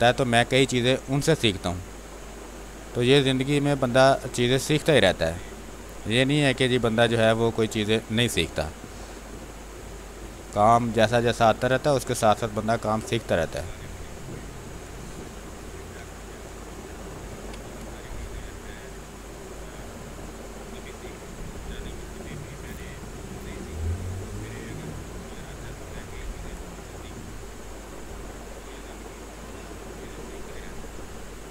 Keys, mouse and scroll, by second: 1.3-5.3 drag, 5.3 space, 5.8 space, 6.5-8.4 drag, 8.4-10.1 drag, 10.1-11.8 drag, 11.8 space, 12.1 click, 12.4 space, 13.2-15.9 drag, 15.9 r, 16.1 click, 17.3 b, 17.8 space, 18.7 click, 19.5 space, 19.6 click, 20.0 space, 20.5-25.9 drag, 25.9 space, 26.1 click, 26.4 space, 27.2-31.5 drag.